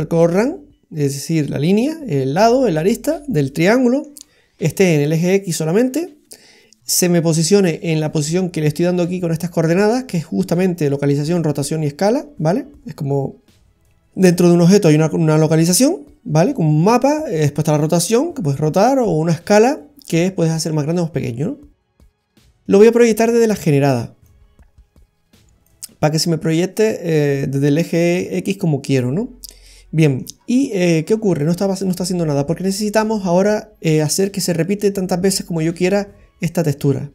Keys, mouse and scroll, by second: 3.2 middle click, 22.0-22.3 scroll down 1, 22.4 middle click, 24.3 click, 29.1-29.7 scroll down 4, 29.6 middle click, 30.4-30.9 scroll down 3, 31.7 middle click, 33.5 click.